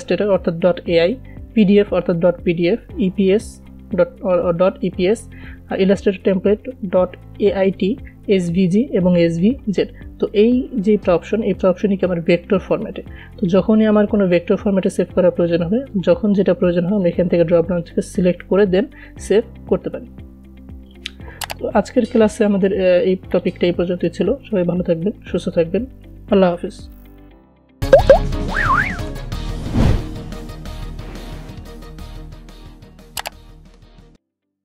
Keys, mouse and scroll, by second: 21.3 click, 24.7 click.